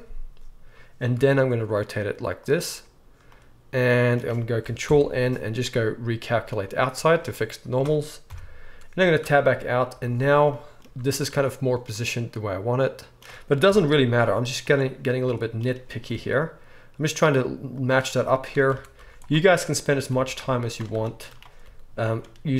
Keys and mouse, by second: 1.1 r, 4.8 alt+n, 7.0-8.3 right drag, 8.2 KP_1, 8.3-9.9 drag, 9.2 Tab, 9.9-20.6 right drag, 9.9 z, 10.8 z, 13.6 KP_1, 14.1 z, 16.1 r, 18.7 Tab, 19.0 z, 20.1 alt+a, 20.6 alt+shift+middle click, 20.8-22.5 alt+shift+right drag, 21.6 g.